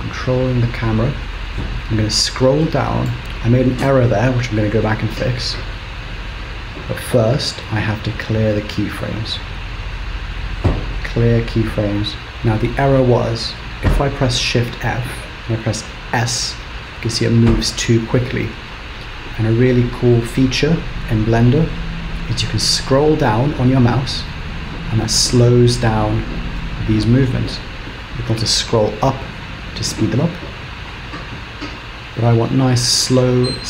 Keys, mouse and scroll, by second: 3.2 space, 5.1 shift+Left, 8.5 click, 9.4 right click, 11.7 right click, 14.4 shift+f.